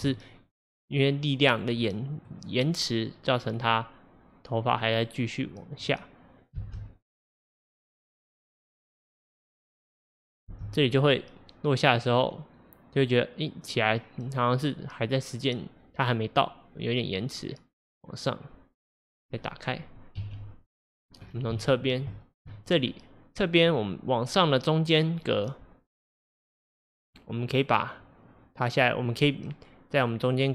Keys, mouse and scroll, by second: 1.6 drag, 1.9-3.8 middle drag, 3.8 click, 6.6 space, 10.6 space, 11.3-14.3 drag, 19.3-20.3 scroll down 5, 20.3 KP_3, 21.0 scroll down 1, 21.8-23.7 scroll up 3, 22.2-22.5 shift+middle drag, 23.7 scroll up 1, 23.8-30.5 drag.